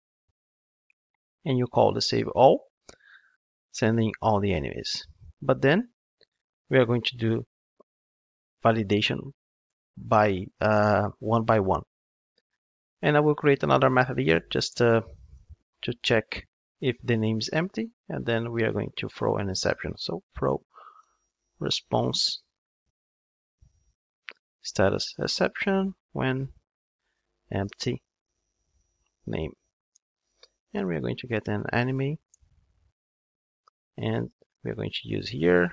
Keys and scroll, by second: 31.6 Return.